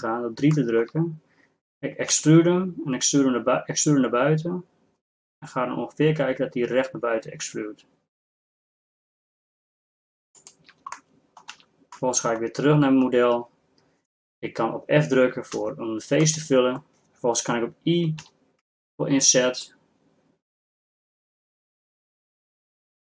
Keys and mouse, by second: 2.1 e, 11.1 middle click, 11.8 z, 15.6 f, 18.3 i.